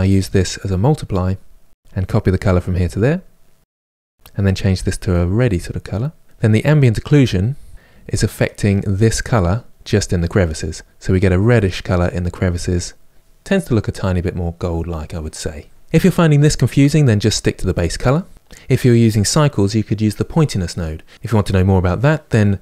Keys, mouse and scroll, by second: 2.7 click, 5.5 click, 6.2-8.1 drag, 12.7 click, 13.2-22.6 middle drag.